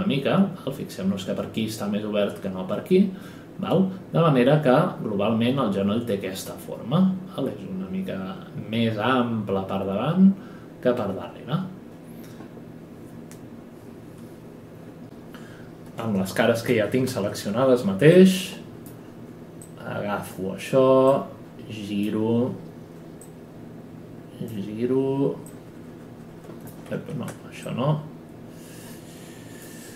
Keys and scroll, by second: 15.5 F11, 16.7 ctrl+e, 26.9 ctrl+z.